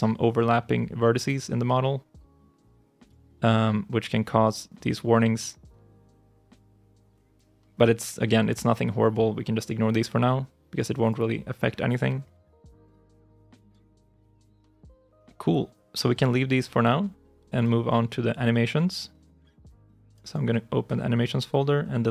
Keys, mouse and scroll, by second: 12.8 ctrl+shift+s, 20.1 double click.